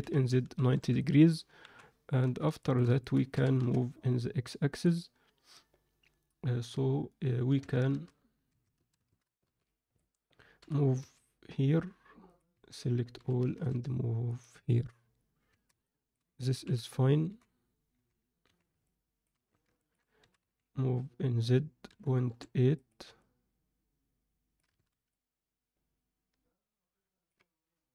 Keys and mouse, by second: 1.6 KP_7, 2.2 z, 2.6 shift+middle drag, 3.0 ctrl+middle click, 3.2 g, 7.6 Tab, 7.8 a, 8.4 1, 8.7 a, 9.4 b, 10.6 g, 13.1 g, 13.1 a, 15.4 Tab, 15.8 middle click, 16.6 KP_1, 17.2 z, 17.9 z, 18.4 z, 18.8-19.2 middle drag, 19.6 ctrl+alt+z, 19.7 ctrl+alt+middle click, 20.2 s, 23.1-24.5 alt+middle drag, 24.8 alt+a, 25.0-27.2 middle drag.